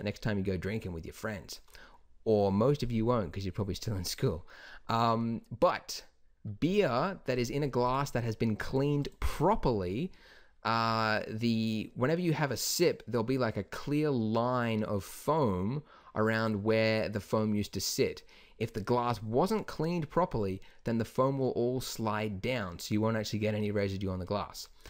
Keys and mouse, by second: 6.3-6.7 middle drag, 7.3-14.9 drag, 19.7 middle click, 24.8 click.